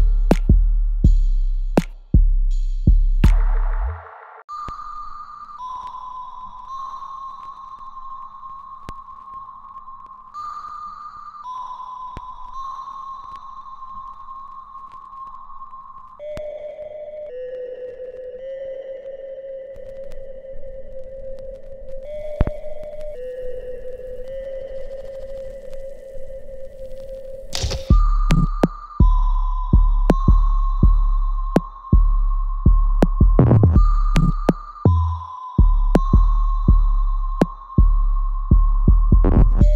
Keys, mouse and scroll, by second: 7.0 alt+middle click, 7.4-9.8 alt+right drag, 9.8 click, 11.8-20.9 ctrl+drag, 20.9 alt+click, 21.3 alt+middle click, 21.8-23.9 alt+right drag, 23.9-27.9 ctrl+drag, 27.9 alt+right click, 29.1-31.2 alt+right drag, 31.2 click, 31.5 alt+click, 32.3 alt+middle click, 32.5 alt+right click, 34.1-38.0 drag, 38.0-39.7 ctrl+drag.